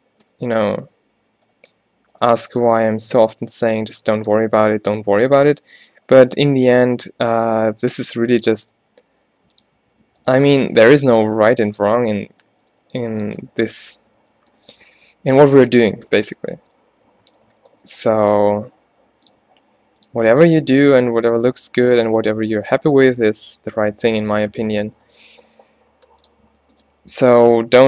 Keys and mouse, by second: 2.2 middle click, 3.6 g, 7.8-9.2 middle drag, 9.1 g, 10.4 g, 11.3 g, 12.9 g, 16.4-17.8 middle drag, 18.4 e, 19.7 r, 20.2 g, 21.2 e, 22.8 click, 22.9 g, 25.5 g, 26.9 g.